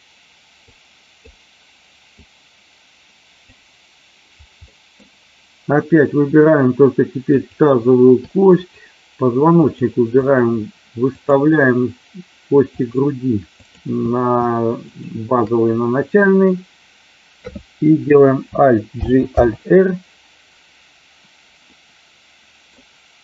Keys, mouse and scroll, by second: 0.6-1.3 drag, 2.2-3.6 drag, 4.7 middle click, 7.3 click, 8.4-8.9 shift+drag, 9.6 shift+click, 10.2 shift+click, 11.2-11.6 shift+drag, 12.7-13.2 shift+drag, 13.6 shift+click, 14.8 shift+click, 18.9 alt+g, 19.3 alt+r, 21.7-22.7 middle drag.